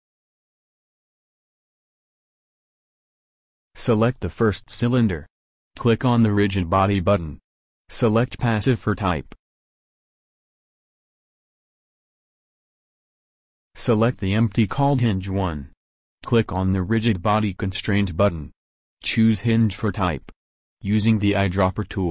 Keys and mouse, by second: 4.0-7.7 drag, 10.2-22.1 drag.